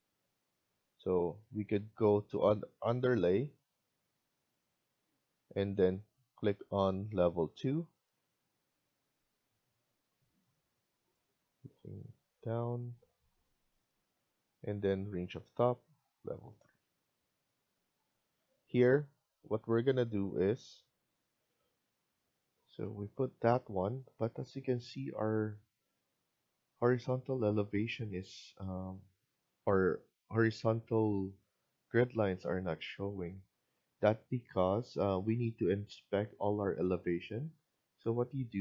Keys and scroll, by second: 14.1 Escape, 21.2 F1, 32.0 Escape.